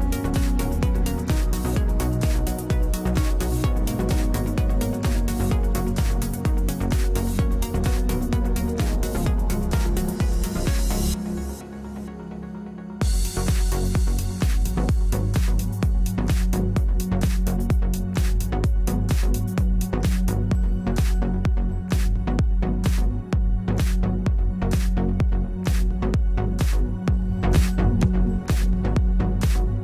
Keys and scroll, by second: 15.5 Delete.